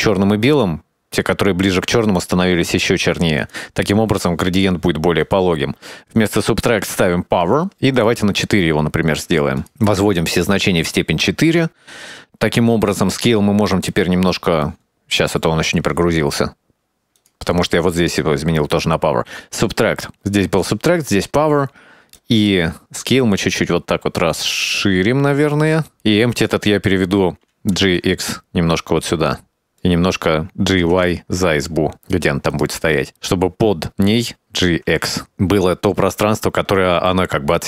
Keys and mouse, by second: 0.0 shift+d, 1.6-5.0 drag, 5.9-7.6 drag, 8.6-9.9 drag, 10.0 middle click, 11.1 middle click, 13.3 middle click, 14.2 middle click, 15.2-16.8 middle drag, 17.2-19.0 drag, 21.2 middle click, 22.2-26.1 shift+drag, 26.6 right click, 27.3 g, 29.7 middle click, 30.7 g, 32.9-34.3 middle drag, 34.7 g.